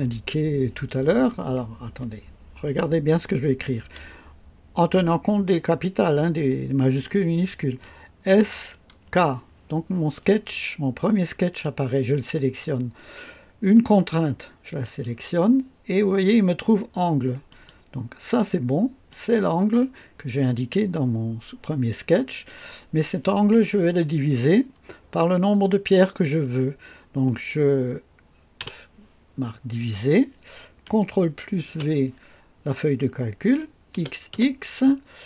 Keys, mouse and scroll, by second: 8.2-9.5 typing, 11.4 click, 14.8 click, 17.4 click, 19.0 click, 28.5 /, 31.6 ctrl+v, 31.7 typing, 33.9-34.8 typing.